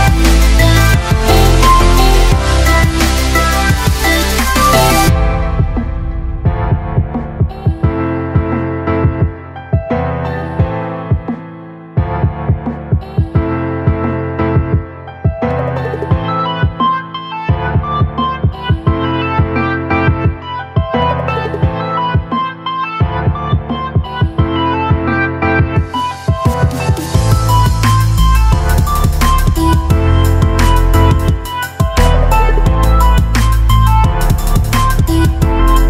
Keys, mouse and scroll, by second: 20.0-20.7 click.